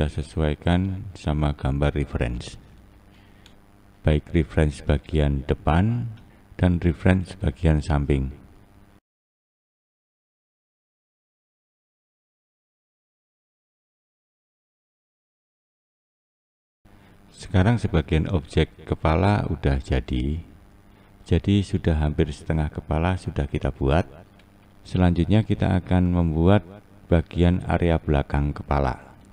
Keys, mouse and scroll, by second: 1.0-2.4 scroll down 1, 2.6-3.9 scroll down 3, 3.9 click, 5.0 click, 8.5-9.1 scroll down 1, 9.1 click, 9.4 scroll down 1, 9.7 click, 10.1 click, 11.0 scroll down 4, 11.1 scroll up 2, 11.4 Left, 11.5 Left, 11.7 Left, 11.9 scroll down 1, 12.0-12.5 scroll up 1, 12.5 click, 13.6 click, 13.7 click, 13.8 click, 14.2 click, 14.3 click, 15.2 click, 15.4 click, 15.9 click, 16.1 click, 16.3 click, 16.5-16.8 scroll down 4, 16.8 click, 17.3 click, 18.8 click, 20.8 Left, 21.7 Left, 26.0 click, 27.0 scroll down 3, 27.2-29.1 scroll up 5.